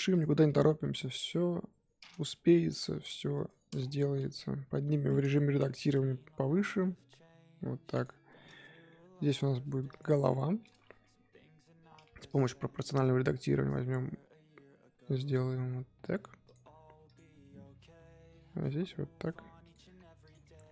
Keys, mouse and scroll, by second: 0.1 click, 0.4 click, 1.3 KP_3, 2.5 shift+middle drag, 2.8-3.3 scroll up 1, 3.3 Tab, 3.8-4.4 scroll down 2, 4.6 Tab, 4.9 a, 8.9 middle click, 9.4-9.9 scroll up 1, 9.9 click, 10.7 middle click, 11.0 KP_3, 12.2 click, 17.0 click, 20.2 click.